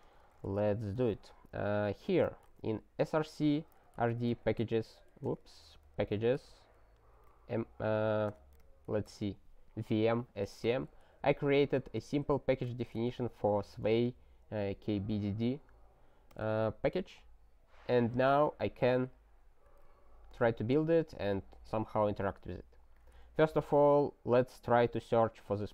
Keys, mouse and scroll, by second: 0.1 space, 0.2 ., 0.6 Return, 1.0 ctrl+f, 10.7 alt+shift+., 12.5 click, 12.7 ctrl+a, 13.1 ctrl+alt+@, 19.8 super+t, 20.7 alt+w, 22.9 click, 23.5 ctrl+space, 24.8 alt+w, 25.4 super+t.